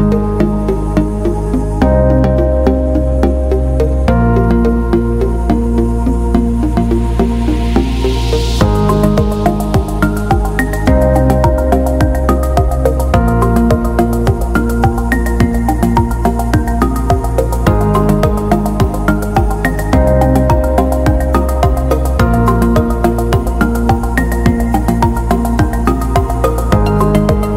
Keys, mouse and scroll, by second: 1.9 click, 5.1-5.5 scroll up 2, 6.9 ctrl+scroll up 2, 11.0 click, 12.7-14.9 drag, 16.1 click, 17.1 click, 20.7 click, 23.7 right click, 25.0 click.